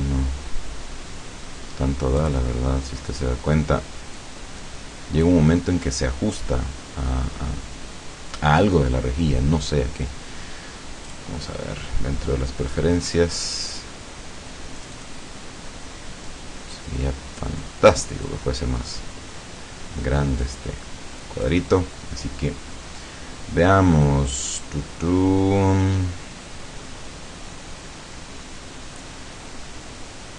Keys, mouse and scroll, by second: 2.2 click, 4.2-5.5 drag, 11.1 click, 13.5-14.3 scroll down 1, 14.9 click, 16.3-17.9 drag, 18.3 click, 20.5-21.7 drag, 24.0 click.